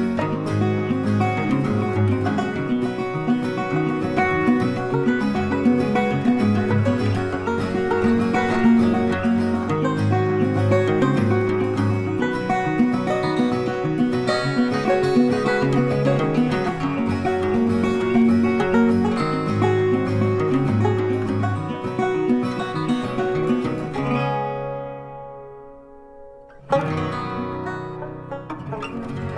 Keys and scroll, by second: 4.5 ctrl+t, 28.4 ctrl+t.